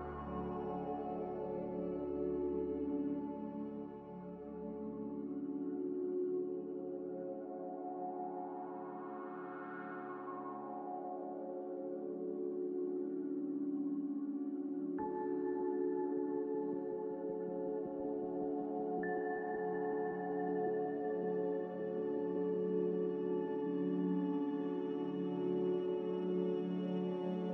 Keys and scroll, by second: 2.3 b, 4.5 Delete, 8.1 n, 22.0 a, 22.6 Delete.